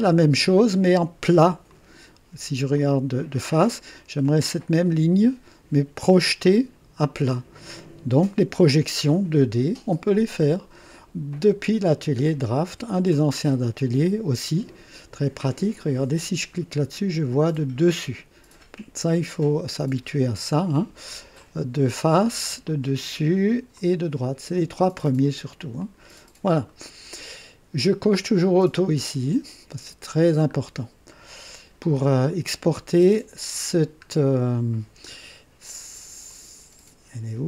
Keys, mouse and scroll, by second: 1.7 click, 2.7 click, 7.6 click, 11.2 click, 12.5 click, 17.8 click, 20.3 right click, 21.4 click, 22.6 click, 23.7 click, 25.7 click, 26.7 right click, 30.2 scroll down 1, 31.1-31.8 right drag, 34.0-34.3 scroll down 1, 36.2 click.